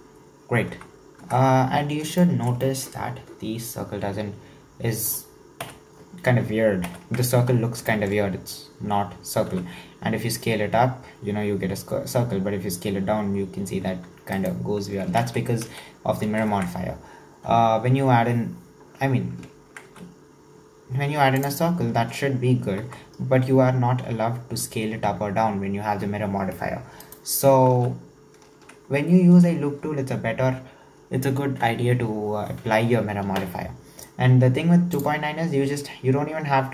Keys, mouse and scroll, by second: 0.0-0.5 scroll down 1, 0.5 scroll up 1, 0.7 Tab, 1.2 Tab, 1.7-2.2 scroll down 2, 2.2-5.6 shift+middle drag, 5.6 KP_7, 6.9 ctrl+KP_7, 7.5-7.9 scroll up 1, 7.9-9.5 shift+middle drag, 9.5 s, 15.5 ctrl+z, 15.9 ctrl+z, 19.9 w, 22.8 s, 28.0 ctrl+z, 29.4 Tab, 34.9 click.